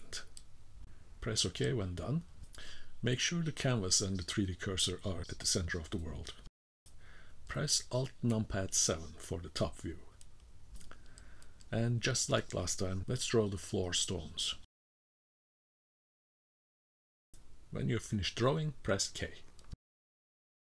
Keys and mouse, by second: 8.1 alt+KP_7, 9.7 KP_0, 10.8 click, 11.6 click, 12.1 click, 12.6 click, 13.0 click, 13.4 click, 13.8 click, 14.2 click, 15.1 click, 16.3 click, 16.6 click, 17.0 click, 17.1 click, 17.4 click, 17.6 click, 18.0 click, 18.1 click, 18.8 k, 19.7-20.7 middle drag.